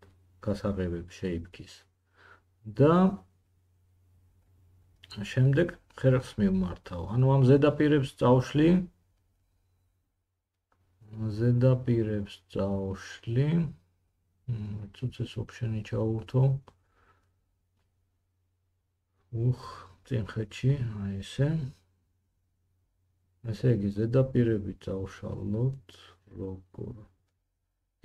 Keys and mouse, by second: 1.7-9.2 drag, 2.2 Tab, 10.7-11.7 drag, 11.7-15.5 middle drag, 15.5-16.8 drag, 16.8-19.6 middle drag, 21.5 KP_3, 24.6-26.3 middle drag, 26.3-28.0 drag.